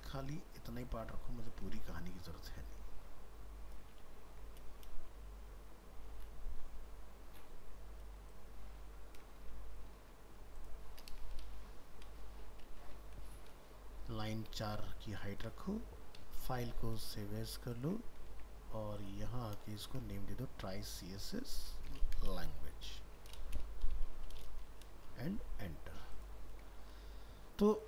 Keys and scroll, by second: 1.7 ctrl+x, 4.0 ctrl+v, 14.7 ctrl+s, 16.5 alt+f, 16.5 alt+秄, 18.3 ctrl+Tab, 20.3 ctrl+shift+Left.